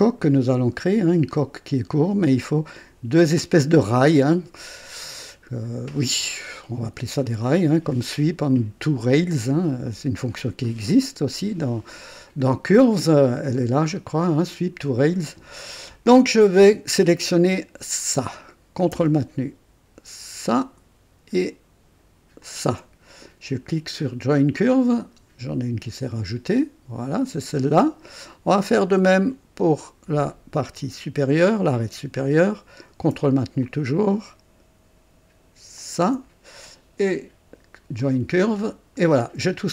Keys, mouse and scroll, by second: 5.0 scroll up 2, 6.0 right click, 7.4 click, 18.0 click, 20.4 ctrl+click, 22.4 ctrl+click, 24.5 click, 25.1-25.4 scroll down 2, 30.8 click, 33.6 ctrl+click, 35.8 ctrl+click, 38.0 click, 38.5-39.3 scroll down 4.